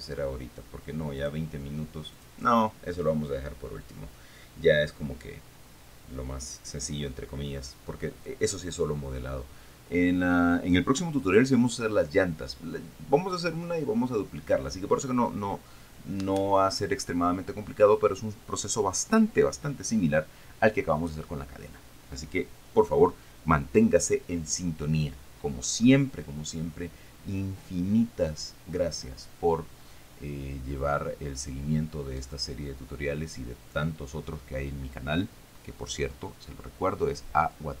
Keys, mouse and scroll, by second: 1.4 click, 2.4 click.